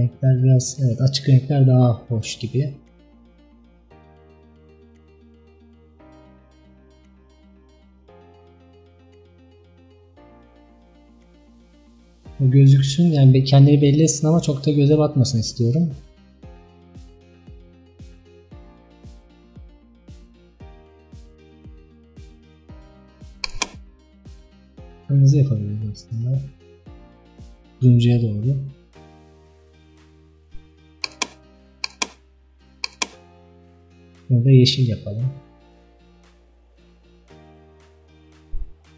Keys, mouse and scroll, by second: 0.0 click, 24.4 click, 32.0 click, 34.1 click.